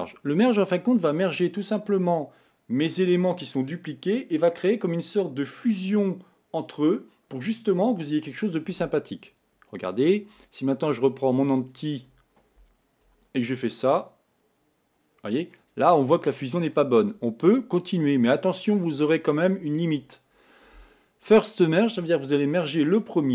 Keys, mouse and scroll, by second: 0.2 click, 11.8 drag, 13.4 r, 16.6-18.6 scroll down 2, 19.1 click.